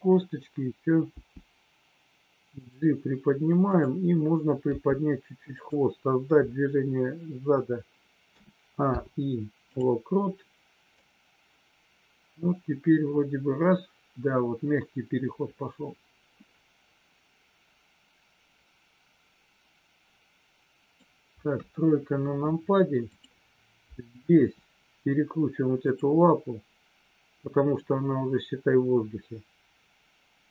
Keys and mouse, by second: 2.5 click, 3.6 click, 8.9 i, 11.0-21.1 drag, 21.5 KP_3, 24.4 r, 25.8 click.